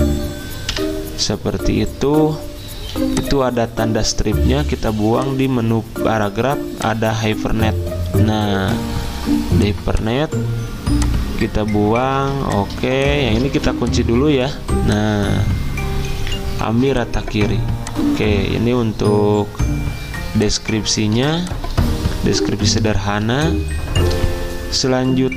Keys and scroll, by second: 0.7 Delete, 12.2 z, 13.5 v, 21.2 z, 23.3 v.